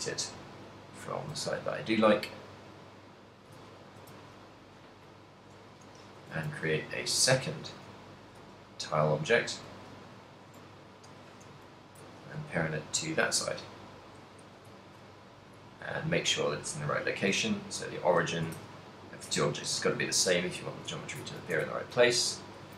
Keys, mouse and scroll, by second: 3.1 click, 3.8 ctrl+middle click, 4.2 shift+s, 6.1 right click, 7.1 right click, 7.1 shift+d, 7.9 middle click, 8.2 g, 9.8 click, 10.5 shift+right click, 11.4 ctrl+p, 12.4 a, 12.9 right click, 14.9 shift+middle click, 15.5 right click, 15.7 shift+s, 17.3 right click, 18.1 right click, 18.6 shift+s, 20.6 a, 21.0 shift+middle click, 21.5 ctrl+middle click, 21.7 a, 22.3 middle click.